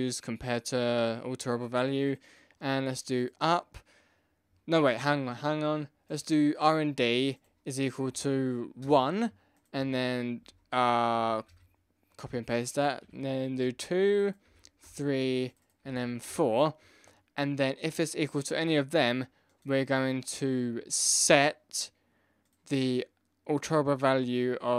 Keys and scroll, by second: 8.8 Return, 10.4 ctrl+c, 10.7 ctrl+v, 11.1 ctrl+v, 11.5 ctrl+v, 13.5 Return, 14.8 Return, 16.2 Return.